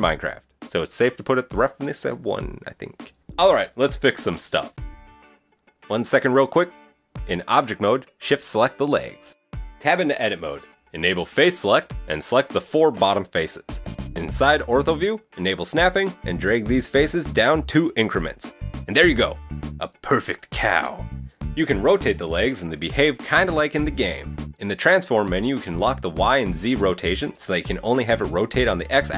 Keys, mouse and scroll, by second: 0.0 shift+middle click, 1.4 click, 2.5 shift+middle click, 2.8 scroll up 1.